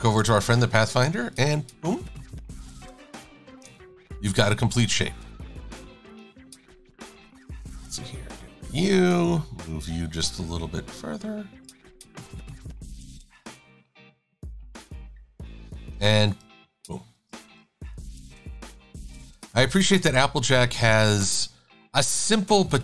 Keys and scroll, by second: 8.2 Delete, 16.0 i, 17.4 shift+super+a.